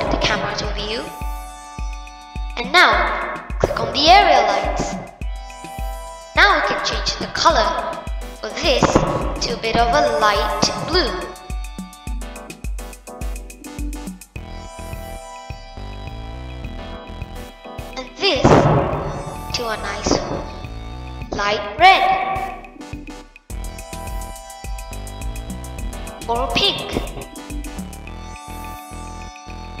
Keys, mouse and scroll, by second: 0.4 click, 1.0-1.9 middle drag, 1.9-3.0 scroll down 2, 3.0-4.2 middle drag, 4.2 click, 5.2-6.9 middle drag, 6.9 click, 16.5-18.0 middle drag, 18.0 click, 18.7-20.2 middle drag, 20.2 click, 26.8-27.5 middle drag, 27.5 scroll up 1, 28.2-29.8 middle drag.